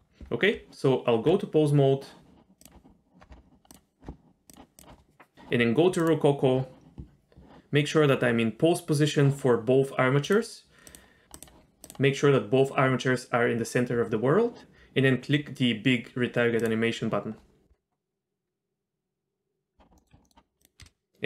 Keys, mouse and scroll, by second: 0.5 Tab, 2.6 click, 3.2-3.7 scroll down 3, 3.7 click, 4.0-4.5 scroll down 2, 4.5 click, 6.0 click, 10.2 click, 10.9 click, 11.3 click, 11.8 click, 16.6-19.3 drag, 20.0 middle click, 20.1 z, 20.2 middle click, 20.6 click, 20.8 space.